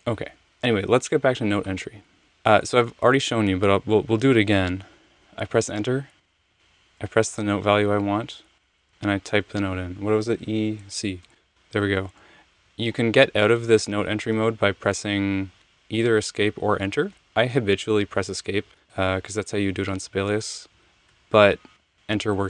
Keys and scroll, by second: 2.2 BackSpace, 6.1 Return, 7.3 7, 8.8 e, 11.2 c, 13.9 Tab, 14.1 typing, 17.6 Home, 18.7 Right, 19.2 Left, 20.7 Right, 21.1 Right, 22.1 Right.